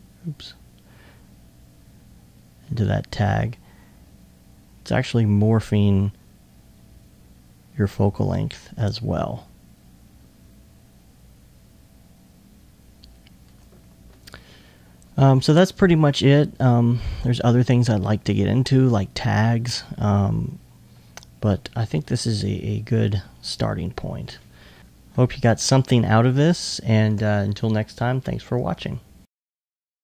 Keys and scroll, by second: 24.8 super+z.